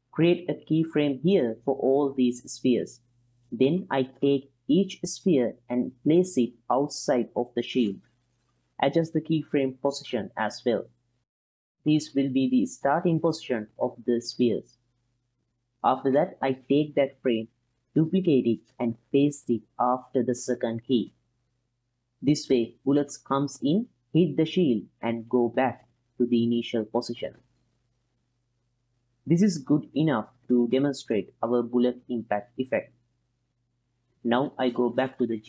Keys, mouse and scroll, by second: 0.5 i, 1.1 click, 2.8 click, 3.3 g, 4.2 click, 4.4 middle click, 4.7 click, 4.9 g, 5.2 click, 5.3 click, 6.1 middle click, 6.4 click, 7.2 middle click, 7.9 click, 7.9 g, 8.9 click, 9.0 middle click, 9.4 g, 9.8 click, 10.0 g, 10.3 click, 11.0 middle click, 11.6 click, 11.6 g, 11.9 g, 12.1 middle click, 12.4 click, 12.5 middle click, 13.0 middle click, 13.0 g, 13.5 g, 13.8 click, 14.0 middle click, 14.6 middle click, 15.1 click, 15.1 g, 15.3 g, 16.1-16.6 middle drag, 17.6 click, 18.2 click, 19.2 shift+d, 21.8 click, 21.9-25.0 typing, 22.4 click, 22.8 click, 23.0 click, 23.5 click, 23.6 click, 24.3 click, 24.8 click, 24.9 click, 25.4 middle click, 26.0-34.1 drag, 34.1 ctrl+s.